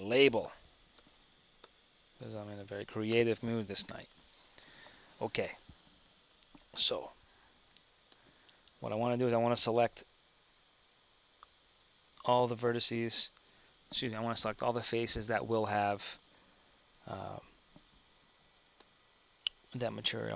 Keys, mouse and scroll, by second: 7.1 Tab, 8.6 Tab.